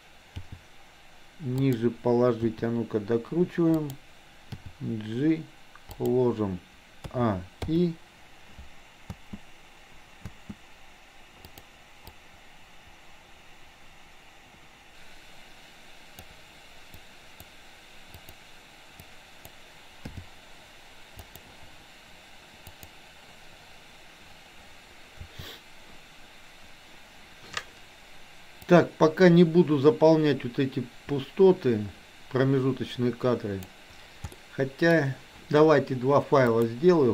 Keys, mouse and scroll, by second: 0.4 g, 2.5 r, 4.6 g, 7.1 a, 7.8 i, 9.1 space, 11.5 click, 12.1-16.3 drag, 17.0-17.6 drag, 18.2 click, 19.0-19.6 drag, 20.1 g, 22.8 click, 25.3 a, 28.8-33.7 drag, 34.3-35.0 middle drag, 36.6-37.1 drag.